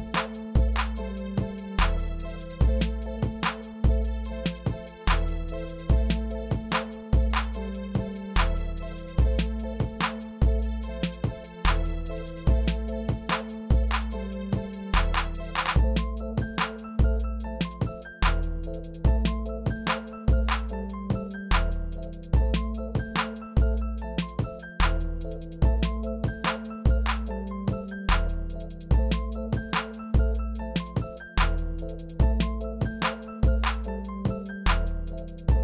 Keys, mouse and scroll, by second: 0.1 middle click, 0.5 click, 0.6 middle click, 0.7 g, 1.1 click, 1.1 middle drag, 1.3 g, 1.5-2.2 middle drag, 2.9 scroll down 4, 3.1 middle click, 3.4 scroll up 3, 3.5 shift+middle click, 4.0 click, 5.4 click, 6.3 click, 6.6 ctrl+a, 7.2 click, 7.4 s, 7.8 drag, 8.1 ctrl+a, 8.4 click, 8.5-8.9 middle drag, 8.9 e, 9.2 click, 9.3 middle click, 9.7 e, 10.4 click, 11.0 s, 11.8 click, 11.9 ctrl+a, 12.3 click, 12.4 middle click, 12.6 e, 13.0 ctrl+a, 13.2 click, 13.4 ctrl+a, 13.8 click, 14.0 ctrl+a, 14.6 g, 15.0 click, 15.1 g, 15.4 click, 15.4 middle drag, 15.6 g, 15.8-16.2 middle drag, 16.0 click, 16.2 e, 16.7 click, 16.8 ctrl+a, 17.2-17.6 shift+middle drag, 17.6 click, 18.0 g, 18.2-18.8 middle drag, 18.9 shift+drag, 19.0 x, 19.2 click, 19.3-19.8 middle drag, 19.8 e, 21.1 middle click, 21.4 e, 21.7 click, 21.8 e, 22.2 click, 22.7 shift+middle drag, 23.0 e, 23.3 e, 23.6 e, 24.1 e, 24.9 middle click, 25.1 click, 25.3 e, 25.7 e, 26.1 e, 26.4 e, 27.8 click, 28.0 shift+click, 28.2-31.9 typing, 28.7 click, 29.5 click, 30.0 drag, 31.0 click, 31.4 middle drag, 31.7 click, 31.8 middle click, 32.5 click, 32.6 middle click, 33.0 scroll down 7, 33.3 middle click, 33.5 Tab, 33.5 scroll up 3, 33.7 scroll down 1, 34.1 click, 34.5 middle drag, 34.8 scroll up 1, 34.9 Tab, 35.0 middle click, 35.3 click.